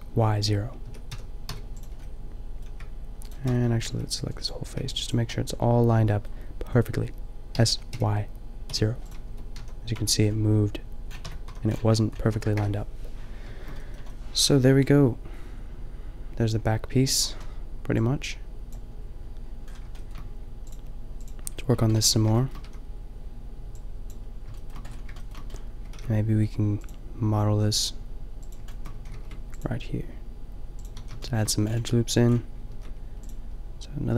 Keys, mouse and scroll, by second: 0.9 click, 0.9 s, 1.9 click, 2.2 middle click, 2.5 middle click, 3.3 middle click, 3.9 b, 4.8 b, 7.5 s, 9.1 click, 9.3 Tab, 9.6 a, 10.0 Tab, 11.2 Tab, 11.4 a, 12.3 a, 12.6 KP_0, 19.9 middle drag, 22.0 Tab, 22.6 a, 26.0 ctrl+r, 27.0-28.6 drag, 29.0 a, 29.2 ctrl+r, 30.9 a, 32.7 ctrl+r.